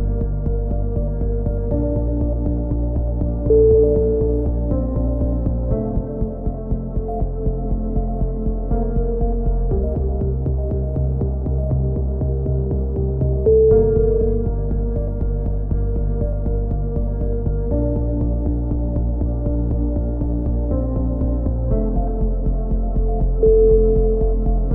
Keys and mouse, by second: 0.7 click, 1.7 click, 2.2-6.0 typing, 2.6 right click, 3.5 right click, 4.4-5.4 right drag, 5.4 click, 7.8 right click, 7.8 f, 8.7 right click, 8.9 click, 9.3 ctrl+z, 9.3 click, 10.0 a, 11.4 click, 11.7 z, 12.1 click, 12.9 click, 14.8 right click, 14.8 z, 15.0 click, 15.7 right click, 16.1 click, 16.5 a, 16.8 right click, 17.7 KP_7, 18.1 click, 18.9-20.4 drag, 19.7 KP_3, 22.2 e, 23.2 KP_7, 23.5 click.